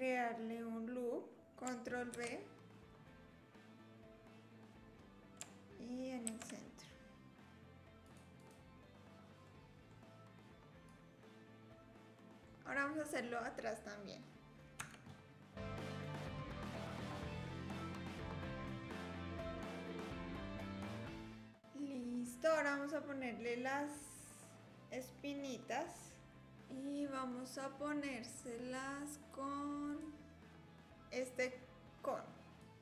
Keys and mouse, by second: 1.4 shift+b, 2.1 ctrl+b, 6.2 ctrl+r, 9.6 click, 10.9-12.4 drag, 14.8 Tab, 15.9 ctrl+b, 16.5 ctrl+r, 16.9 click, 17.1 click, 17.5 click, 17.7 ctrl+r, 18.2 ctrl+b, 19.1 ctrl+z, 19.1 click, 19.3 click, 19.7 click, 19.9 click, 20.1 click, 20.3 alt+click, 20.8 click, 21.0 click, 21.5 Tab, 28.4-32.8 drag.